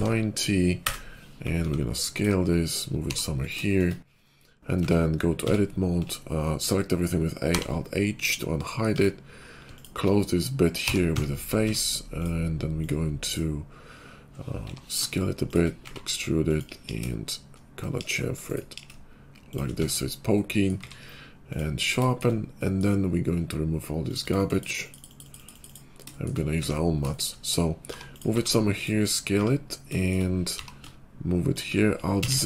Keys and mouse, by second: 1.5 s, 2.9 g, 4.7 Tab, 5.2 a, 7.4 alt+h, 8.9 Tab, 9.6 alt+click, 10.7 f, 11.1 Tab, 11.5 Tab, 12.7 click, 14.4 i, 15.7 e, 16.8 ctrl+b, 18.6 ctrl+b, 19.3-24.2 shift+middle drag, 19.7 Tab, 20.8 q, 24.2-28.2 drag, 26.5 `, 27.8 g, 28.2-31.9 middle drag, 28.2 s, 29.3 `, 30.4 g, 32.2 alt+z.